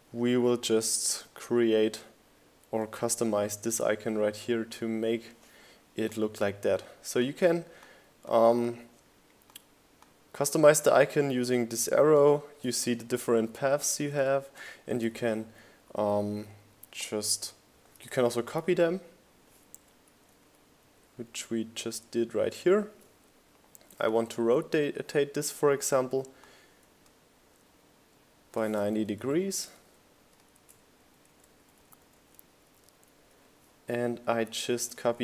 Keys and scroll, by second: 6.7 shift+Left, 7.8 shift+Right, 8.8 Left, 11.4 super+c, 11.9 super+v, 13.4 shift+Up, 14.1 Down, 14.7 Up, 16.1 Down, 22.6 Return, 23.4 shift+Right, 24.1 shift+Down, 24.2 Left, 24.6 Up, 24.9 Right, 25.0 Up, 25.2 Right, 25.6 Up, 25.8 Right, 26.7 Up, 28.2 super+c, 28.3 super+v, 28.6 shift+Down, 29.2 shift+Up, 29.9 Down, 31.6 Down, 32.1 Up.